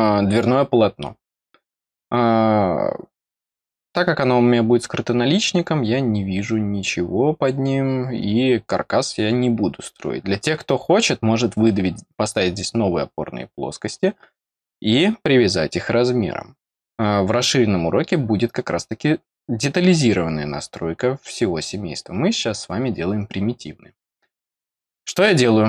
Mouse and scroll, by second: 2.8 scroll up 1.